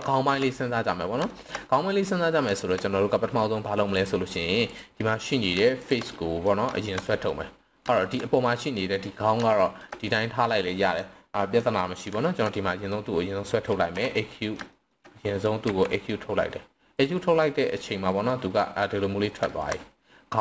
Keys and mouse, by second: 0.0 shift+middle drag, 0.5 middle click, 1.3 shift+middle drag, 1.6-2.0 middle drag, 2.5 shift+middle click, 3.9 click, 5.0 middle drag, 6.1-6.5 middle drag, 6.7 shift+middle drag, 7.0 middle click, 7.9 shift+middle click, 9.5 shift+middle drag, 12.2 shift+middle click, 12.5 middle click, 13.9 KP_3, 14.7 shift+middle click, 15.7 e, 17.0 drag, 17.5-18.3 middle drag, 18.5 middle drag, 19.5 shift+middle drag, 19.7-20.4 middle drag.